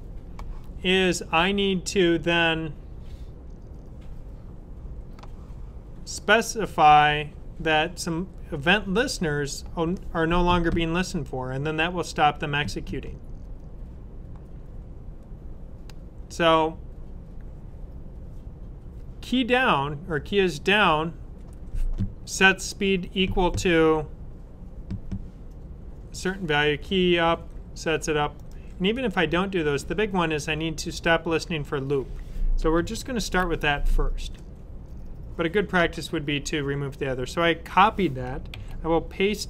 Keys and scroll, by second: 33.1 super+c, 38.4 super+v.